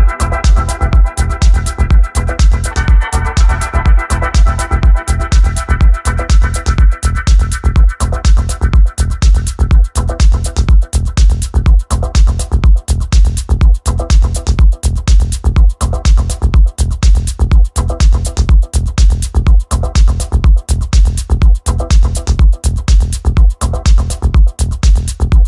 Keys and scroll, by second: 6.0 3, 7.6 Return, 12.6 3, 13.1 Return, 22.7-25.4 typing.